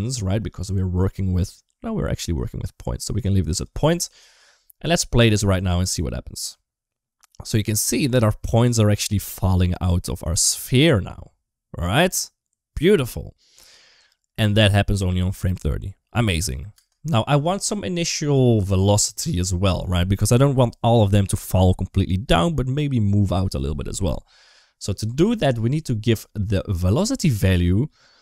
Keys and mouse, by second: 0.2 middle click, 1.9 middle click, 3.0 click, 5.4 space, 16.6 space, 17.5 middle click, 19.1 middle click, 27.2-28.2 middle drag.